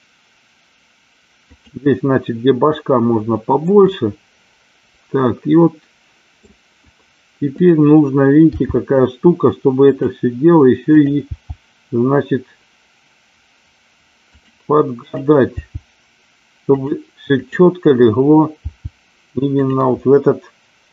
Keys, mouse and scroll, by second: 1.5 click, 3.8-6.4 middle drag, 7.5 click, 8.5 g, 11.7 g, 14.3 click, 14.9 click, 15.7 g, 16.7 click, 17.5 click.